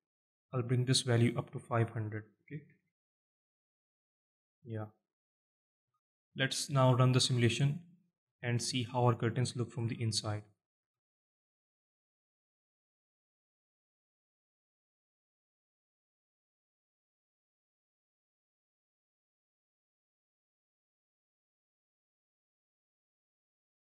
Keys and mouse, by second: 1.3-3.5 drag, 2.4 KP_0, 5.1-5.4 alt+middle drag, 5.7-6.0 alt+shift+middle drag, 6.2-6.5 middle drag, 7.5 alt+middle click, 8.1-8.5 shift+middle drag, 8.9 alt+middle click, 9.3 alt+shift+middle drag, 10.2 alt+shift+middle click, 10.8-11.2 alt+middle drag, 11.3-12.1 shift+middle drag.